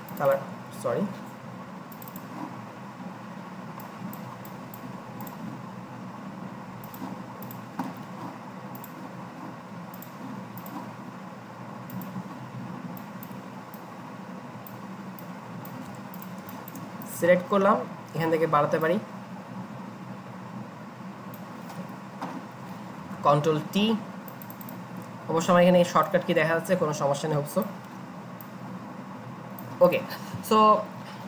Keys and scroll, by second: 1.4 Escape, 23.0 ctrl+t.